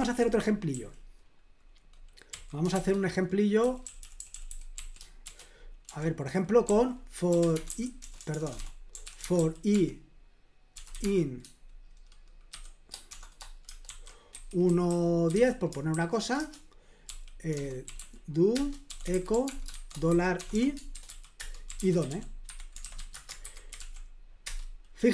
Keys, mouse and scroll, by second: 0.0 super+l, 0.7 k, 2.3-11.4 typing, 12.5-23.3 typing, 16.4 Return, 18.5 Return, 23.5 super+h, 23.8 ctrl+p, 24.5 Return.